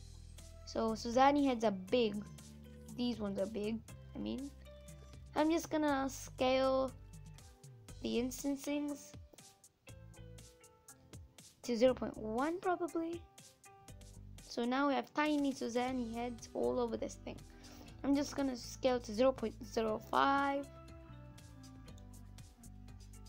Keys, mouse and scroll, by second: 2.5 scroll down 5, 3.1-8.7 middle drag, 8.7-13.1 drag, 13.5 scroll up 2, 13.8 middle click, 14.7 scroll up 3, 15.3-20.4 middle drag, 20.4 click, 20.9-22.0 middle drag, 22.0-22.4 scroll up 2, 22.4-23.2 middle drag.